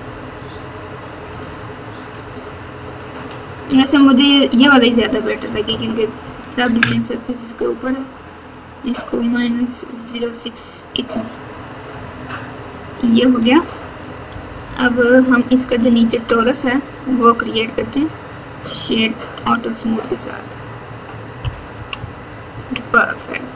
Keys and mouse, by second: 1.3-2.3 drag, 3.3 click, 5.4 KP_6, 5.6 KP_6, 9.7 click, 11.0 click, 14.2-16.4 typing, 19.3 Tab, 19.8-20.7 drag, 21.7 KP_6, 21.9 KP_6, 22.5 KP_6.